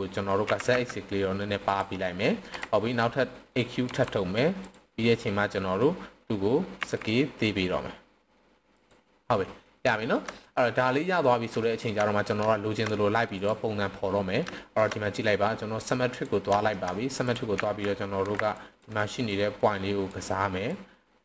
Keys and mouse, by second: 0.4 s, 0.6 z, 1.6 click, 2.4 KP_7, 3.9 e, 4.6 click, 6.8 s, 8.7 click, 9.9 shift+middle click, 11.6 shift+middle drag, 12.5 shift+middle click, 13.3 click, 14.6 shift+middle click, 16.0 click, 16.6 shift+middle click, 17.6 z, 18.2 c, 18.9 right click, 19.2-20.1 drag, 20.7-21.2 drag.